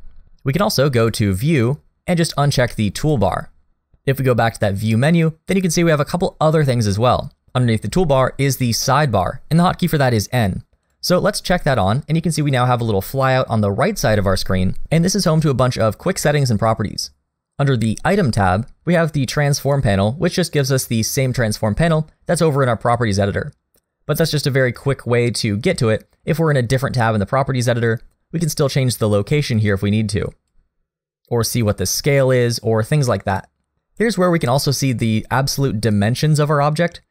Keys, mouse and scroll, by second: 1.0 click, 4.8 click, 25.2 click, 28.6 click, 32.1 click.